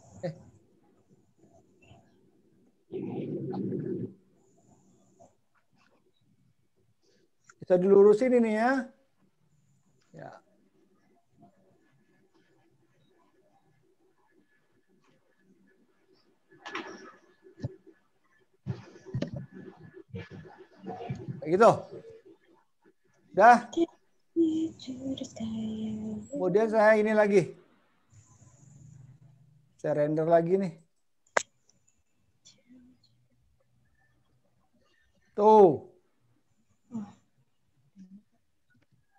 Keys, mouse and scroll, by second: 1.4 ctrl+z, 2.7 ctrl+z, 5.7 click, 8.5 click, 11.0 click, 12.2 click, 14.3 click, 16.3 click, 18.9 click, 23.0 click.